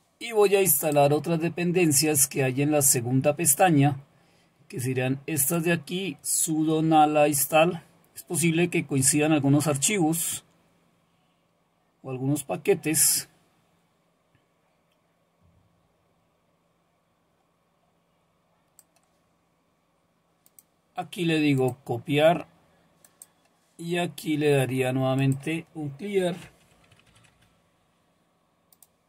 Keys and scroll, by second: 26.2-27.6 typing.